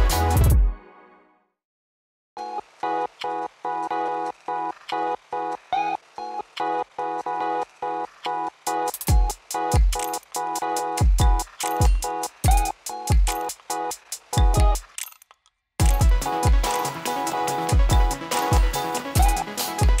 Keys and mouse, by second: 0.3-5.6 drag, 5.6 space, 9.4 space, 10.3 click, 11.0 space, 15.9 click, 16.5 u, 17.3 ctrl+a.